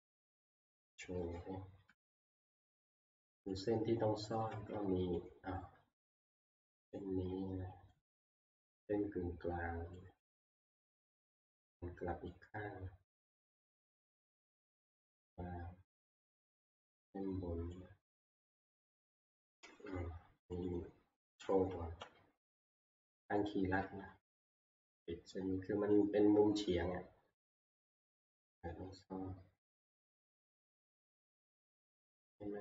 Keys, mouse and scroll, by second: 0.4 scroll, 1.9 alt+j, 3.4 middle click, 3.5-5.5 middle click, 3.8-4.5 scroll, 4.5 e, 5.5 shift+click, 6.8 middle click, 6.9 middle click, 8.6 shift+middle click, 10.2 shift+click, 11.3 middle click, 12.3 middle click, 13.3 middle click, 13.3 middle click, 13.5 middle click, 13.8 middle click, 15.8 scroll, 16.0 shift+click, 16.9 shift+click, 17.7 shift+click, 18.8-21.1 shift+click, 22.1 alt+j, 23.8 middle click, 25.0 shift+click, 25.1 shift+click, 25.1 e, 26.0 shift+click, 26.2 shift+click, 28.5 middle click, 30.3 middle click, 31.7 shift+click, 32.3 shift+click.